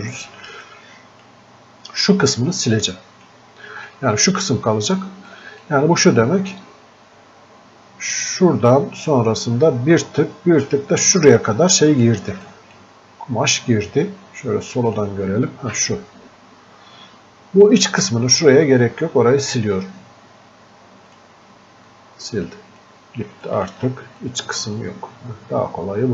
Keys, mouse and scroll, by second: 5.7 click, 7.7 scroll up 2, 7.9-8.7 scroll down 2, 8.7-9.8 scroll down 1, 12.5 click, 14.9-18.3 drag, 21.1-23.5 drag, 24.3-26.1 drag.